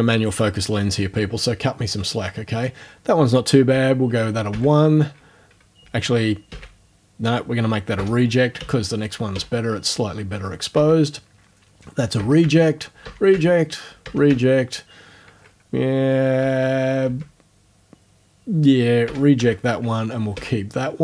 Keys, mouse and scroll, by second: 3.8 1, 4.5 Right, 6.5 Left, 8.0 r, 8.6 Right, 9.3 1, 10.8 Right, 12.2 r, 12.4 Right, 13.0 r, 13.3 Right, 14.0 r, 14.3 Right, 16.4 Right, 17.0 Left, 19.1 r, 19.4 Right, 20.3 1.